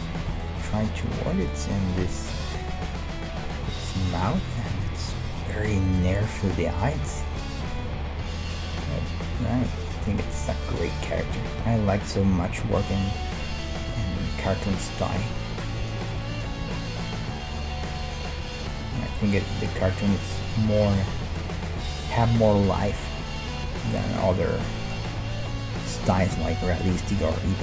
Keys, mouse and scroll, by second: 2.9-6.0 right drag, 5.3-7.8 middle drag, 7.0 a, 8.6-10.5 drag, 9.3 g, 10.9-12.7 drag, 11.3 e, 12.5 e, 14.0 e, 15.5-18.3 right drag, 15.7 g, 16.6 g, 17.9-19.7 drag, 19.5-24.6 right drag, 19.9 g, 20.9 g, 21.8 g, 23.0 g, 24.4-26.5 middle drag, 25.4-26.5 right drag, 26.9 g.